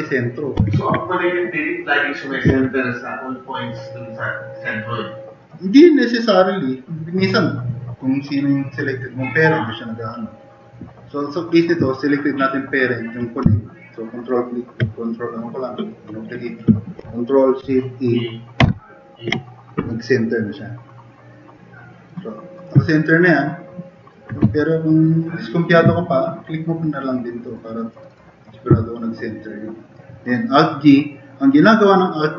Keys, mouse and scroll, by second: 0.8 ctrl+z, 2.4 ctrl+z, 18.6 ctrl+shift+e, 25.5 click.